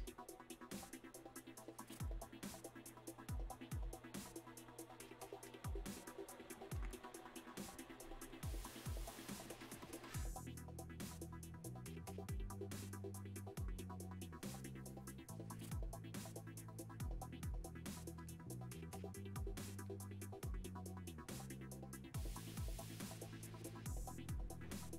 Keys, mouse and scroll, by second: 4.4 click, 18.3 click, 22.2 click.